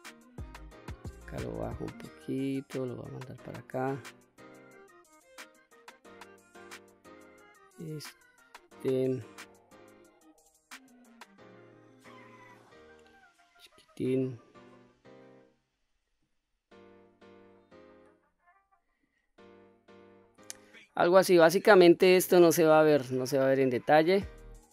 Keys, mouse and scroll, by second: 0.7-2.1 drag, 2.8-3.8 drag, 7.5 click, 8.5-9.8 drag, 10.7-13.0 drag, 13.8-16.0 drag, 16.9-18.8 drag, 19.8 click, 20.6-21.9 drag, 22.9 click.